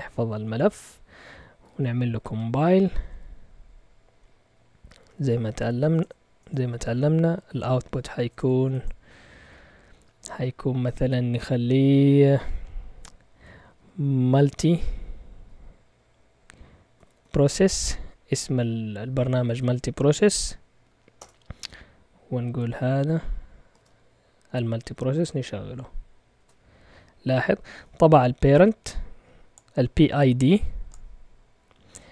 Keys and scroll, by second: 1.3-3.6 typing, 4.6-9.9 typing, 13.3-14.8 typing, 16.7-18.3 typing, 21.2 Return, 22.4 typing, 23.6 typing, 23.7 Tab, 26.3 Return.